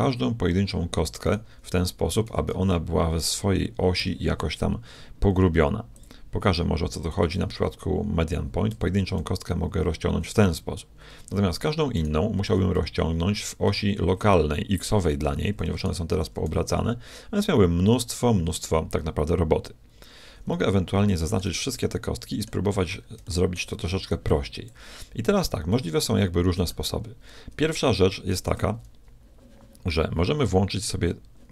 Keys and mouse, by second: 0.5-2.4 middle drag, 2.2 s, 2.4 right click, 5.9-7.9 drag, 8.7 s, 11.9-13.7 right drag, 12.5 s, 15.7-17.6 drag, 16.2 s, 21.0-22.1 shift+middle drag, 23.9 b, 24.8 middle click, 25.7-27.2 middle drag, 27.4-30.1 middle drag.